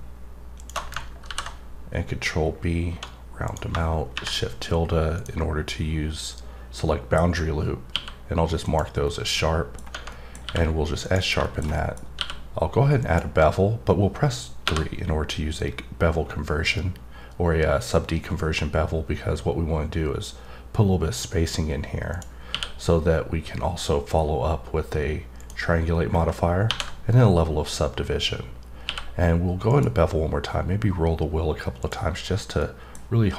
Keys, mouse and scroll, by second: 0.6 click, 2.0-3.4 scroll up 4, 3.4 click, 5.1 click, 8.6 click, 9.1 scroll down 2, 9.3 middle click, 10.1 middle click, 11.0 click, 11.4 middle click, 11.7 double middle click, 13.0 click, 22.1 click, 25.3 click, 26.0-26.7 scroll down 1, 27.1 middle click, 29.7 click, 30.4-31.8 scroll up 2, 31.8 click, 32.6 middle click.